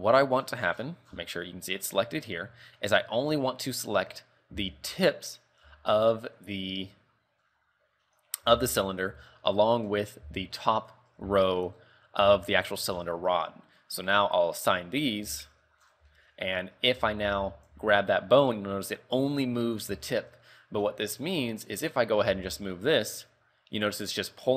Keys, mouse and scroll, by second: 0.0 Tab, 0.6-1.6 scroll down 16, 2.2 scroll up 3, 2.7 Tab, 3.0 middle click, 3.7-4.3 scroll up 6, 4.3 middle click, 4.7 z, 5.8 l, 6.2-6.5 scroll down 5, 7.1 middle click, 7.7 scroll up 3, 8.6 l, 8.9 scroll up 3, 9.2 z, 9.6 middle click, 10.9 alt+shift+right click, 11.5 shift+middle click, 11.9 scroll up 3, 12.7 alt+shift+right click, 13.1 scroll down 4, 14.0 scroll down 2, 14.7 click, 15.4 KP_3, 16.0 Tab, 16.3 shift+middle click, 17.1 z, 17.4 z, 18.0 g, 20.2 shift+middle click, 20.7-21.2 scroll down 3, 22.0 right click, 22.6 r.